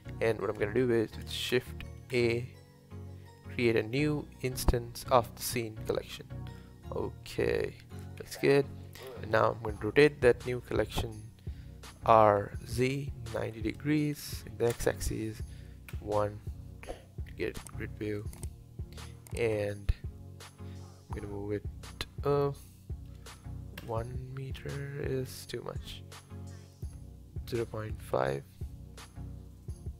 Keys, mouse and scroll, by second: 2.1 shift+a, 6.2-8.2 middle drag, 8.2 KP_7, 9.0-9.4 scroll down 2, 9.4-10.7 shift+middle drag, 10.7 r, 15.9 KP_1, 17.3-17.6 scroll up 2, 17.8-20.8 shift+middle drag, 22.4-25.3 drag, 25.3-26.8 scroll down 1, 26.8-29.9 drag.